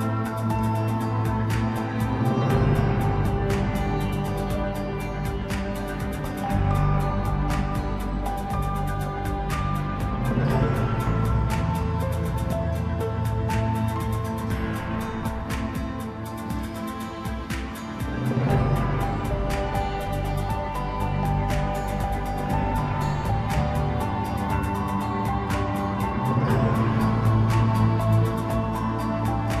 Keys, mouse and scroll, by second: 0.0 ctrl+r, 2.8 Tab, 3.1 scroll down 4, 3.4-4.8 middle drag, 4.8 KP_1, 5.4-5.9 scroll up 2, 6.1 scroll down 1, 6.2-7.1 middle drag, 7.1-7.7 scroll up 2, 7.7 KP_1, 8.7 s, 10.6 g, 12.0-12.9 scroll down 1, 12.9-14.1 scroll up 1, 14.1 shift+d, 16.3 g, 19.2 r, 23.4-23.7 scroll up 3, 23.7-24.6 scroll down 2, 24.6 g, 27.3 s, 28.4-29.6 middle drag.